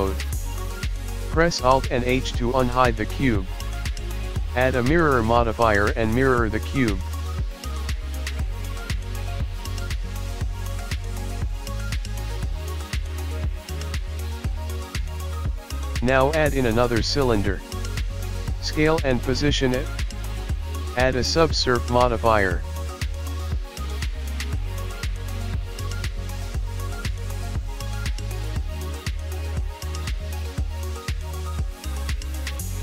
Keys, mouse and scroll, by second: 2.0 alt+h, 3.3 click, 4.2 middle click, 4.7-6.9 scroll up 4, 6.9 click, 7.3 click, 10.8 click, 11.3 scroll down 4, 11.5 middle click, 13.1 middle click, 14.2 middle click, 15.5-15.8 scroll down 1, 15.5 KP_1, 15.8 middle click, 16.4 shift+a, 18.1 KP_7, 18.7 g, 21.1 s, 22.6 click, 23.5 s, 24.2 middle click, 24.8 KP_1, 25.0-25.6 scroll down 3, 25.2 click, 25.6 s, 26.6 middle click, 26.8-27.3 scroll up 4, 27.8 KP_1, 28.0-29.2 scroll up 4, 28.1 shift+middle click, 28.8 shift+middle click, 29.2 click, 29.5 g, 30.3 scroll up 1, 32.6 middle click.